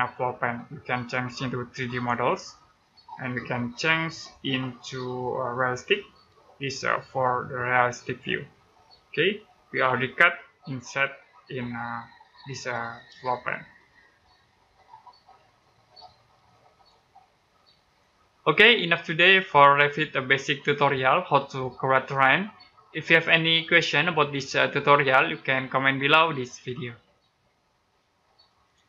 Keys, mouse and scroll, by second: 1.7 click, 6.5 middle click, 8.7-10.9 scroll up 1, 13.2 middle click, 16.6 click, 17.2 scroll down 1, 17.5 middle click.